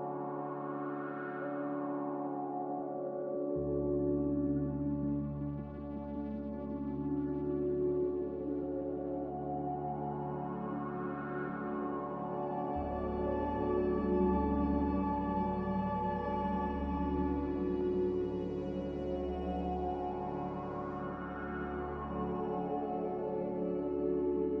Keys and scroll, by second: 3.8 z, 4.9 Delete, 5.5 x, 7.2 x, 8.8-9.1 typing, 9.4 Return, 11.1-12.2 typing, 11.7 Return, 14.6-15.4 typing, 18.1-18.9 typing, 22.4 z.